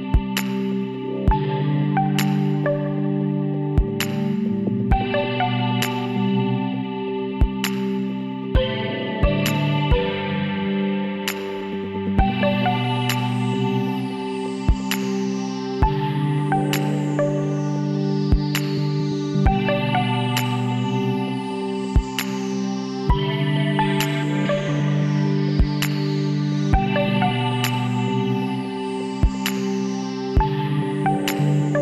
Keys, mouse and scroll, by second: 3.7 x, 4.5-6.4 middle drag, 6.4 Tab, 7.5 KP_1, 14.2-15.8 middle drag, 16.6 shift+a, 19.2 s, 22.0-24.1 drag, 24.1-25.7 middle drag, 25.0 s, 30.2 Tab.